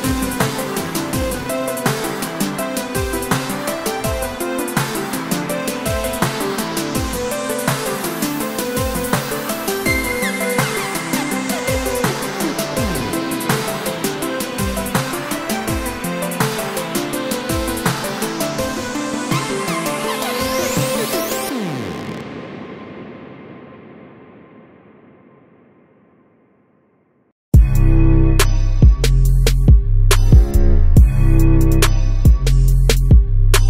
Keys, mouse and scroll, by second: 0.3 Tab, 0.6 click, 1.1 e, 2.1 Escape, 2.7 click, 3.1 e, 4.9 click, 5.1 s, 6.5 click, 7.3 shift+z, 8.1 g, 9.5 click, 9.6 e, 10.6 click, 10.8 Tab, 11.3 shift+z, 11.8 Tab, 12.1 click, 12.6 i, 13.9 click, 14.6 e, 15.5 Escape, 15.7 click, 16.4 e, 19.3 click, 19.6 Tab, 20.1-22.2 middle drag, 21.8 Tab, 22.1 scroll up 2, 22.2 click, 22.5 shift+z, 23.2 s, 24.9 click, 25.0 Tab, 25.3 click, 25.5-29.2 middle drag, 26.1 shift+z, 26.4-26.7 scroll down 2, 27.2 scroll down 1, 29.2 click, 29.4 s, 30.3 click, 30.6 shift+d, 32.6 click, 32.7-33.6 middle drag.